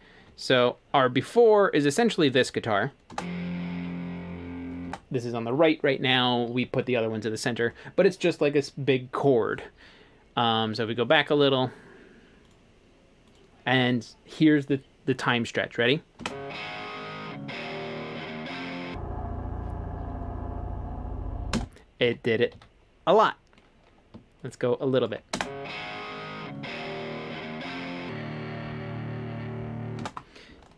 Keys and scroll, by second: 3.1 space, 4.9 space, 16.2 space, 21.6 space, 22.1 super+z, 25.4 space, 30.0 space.